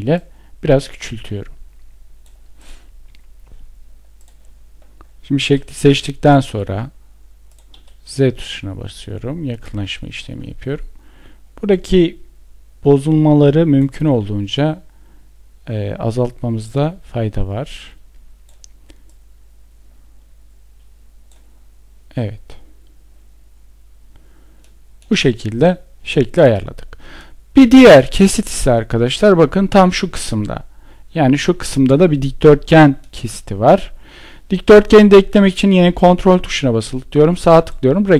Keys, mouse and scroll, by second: 35.7 ctrl+right click, 37.1 ctrl+click.